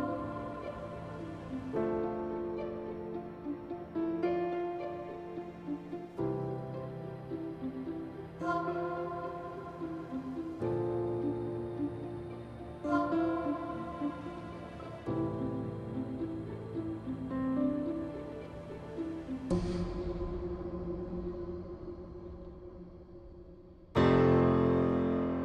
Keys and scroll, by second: 0.5 f, 3.2 ctrl+z, 6.6 f, 9.2 Delete, 10.9 f, 11.7 Delete, 12.1 Delete, 12.9 q, 14.0 Delete, 17.7 2, 17.8 Return.